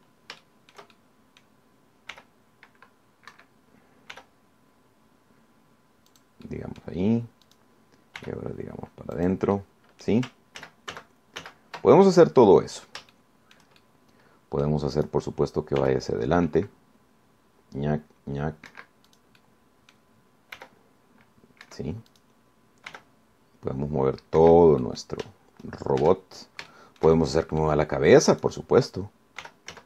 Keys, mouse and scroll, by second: 1.6-2.8 shift+drag, 3.4 r, 4.5 Escape, 5.4 r, 7.3 click, 7.7 click, 8.7 click, 9.4 r, 10.4 click, 10.8 click, 11.8 ctrl+z, 13.2-13.8 ctrl+scroll down 3, 14.4 shift+click, 15.4 click, 16.2 click, 17.0 r, 19.9 Escape, 20.3 click, 20.6 click, 21.8 r, 22.8 Escape, 23.3 click, 24.1 r, 25.6 Escape, 26.0 click, 26.2 middle click, 26.4 Caps_Lock, 27.9 shift+click, 28.8 middle click, 28.9 right click, 29.5 click.